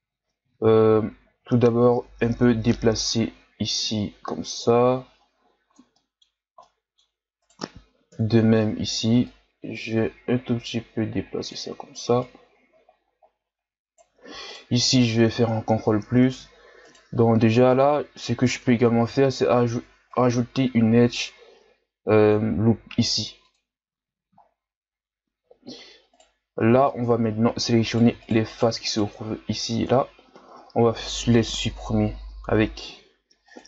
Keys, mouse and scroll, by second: 1.3-2.5 ctrl+scroll up 1, 2.5 o, 3.1-5.9 drag, 5.9-7.4 middle drag, 7.4 right click, 8.1 KP_1, 9.2-12.2 drag, 12.2 right click, 14.5 right click, 15.3 ctrl+KP_Add, 16.8 right click, 17.9-19.1 scroll down 1, 19.1 ctrl+r, 23.8-24.4 scroll up 1, 24.4-25.6 shift+scroll down 2, 25.6-26.1 shift+scroll up 2, 26.1 right click, 26.9 ctrl+Tab, 27.8 right click, 28.2 shift+right click, 28.5 shift+right click, 28.9 shift+right click, 30.5 x.